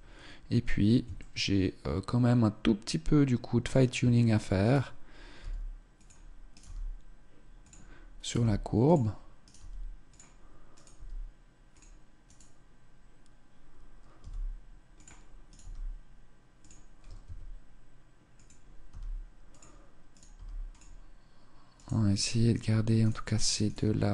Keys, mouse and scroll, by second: 0.6 shift+middle click, 1.5 shift+middle click, 4.2 right click, 4.3 g, 6.1 right click, 6.2 g, 7.7 right click, 7.9 g, 9.0 right click, 9.1 g, 10.3 right click, 10.5 g, 11.3 click, 11.8 right click, 13.7 g, 15.0 right click, 15.1 g, 16.6 s, 18.4 g, 19.7 right click, 19.9 g, 20.3 click, 21.3 right click, 22.5 right click, 23.7 g.